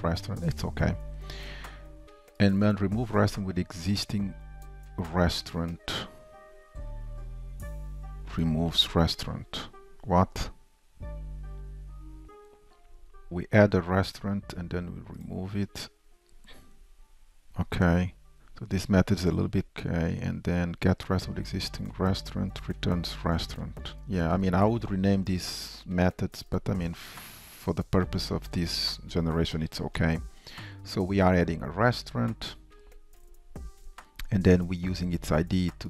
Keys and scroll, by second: 21.9 alt+Down, 23.9 ctrl+shift+Down.